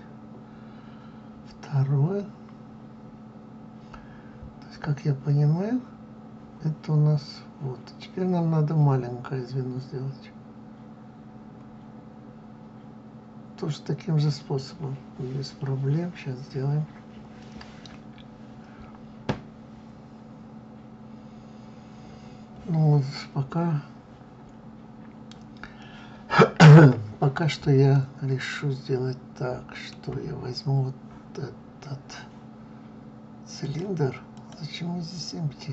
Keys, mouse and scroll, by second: 2.2-2.7 scroll down 3, 3.3-5.7 scroll up 1, 14.0 scroll up 1, 27.8-30.8 middle drag, 33.5 click, 34.2 click.